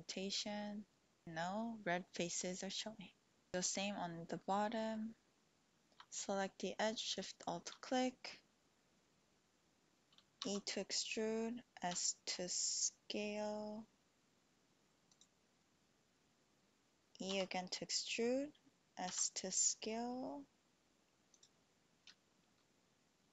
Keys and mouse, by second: 0.5-2.1 drag, 2.1-3.5 middle drag, 3.9-5.0 middle drag, 7.1 alt+shift+click, 10.4 e, 12.1 s, 15.1 click, 17.3 e, 19.1 s, 21.4 click.